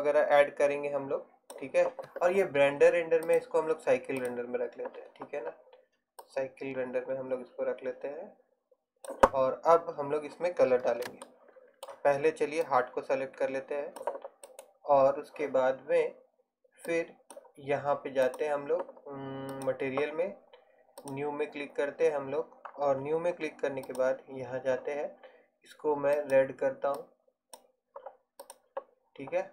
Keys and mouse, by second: 3.3-8.3 drag, 12.2 middle click, 13.0-15.6 drag, 15.6-16.6 right drag, 17.0-22.8 drag, 22.8-23.9 middle drag, 23.9-25.9 drag, 28.5-29.5 drag.